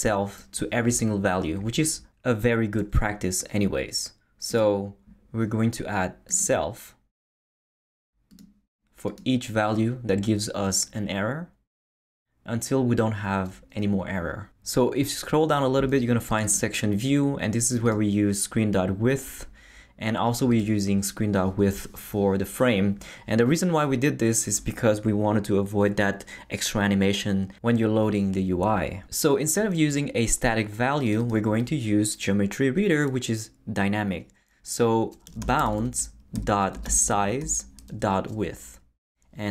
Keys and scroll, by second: 35.0-37.9 typing.